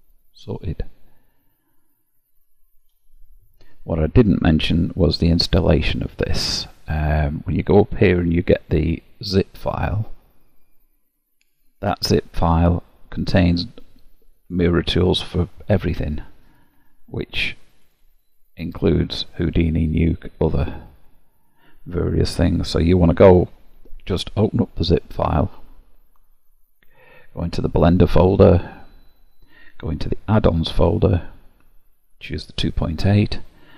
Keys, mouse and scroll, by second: 3.7 Tab.